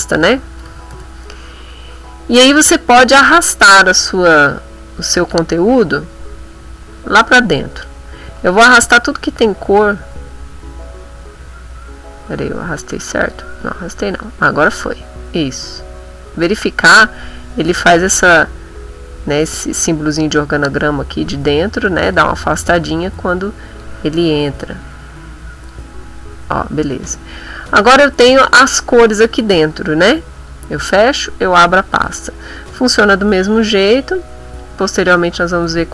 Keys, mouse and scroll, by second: 0.0-1.1 typing, 3.2-5.5 drag, 6.1-7.4 drag, 8.4-9.9 drag, 12.4 click, 14.5-16.6 drag, 23.8-25.9 drag, 27.5 click, 28.5 click, 29.6 click, 30.3 click, 30.8 click.